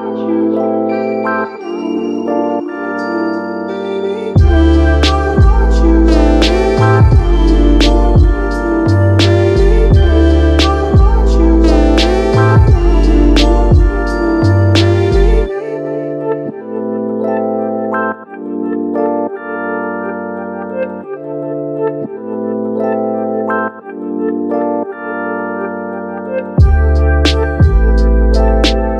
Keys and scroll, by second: 9.4 space.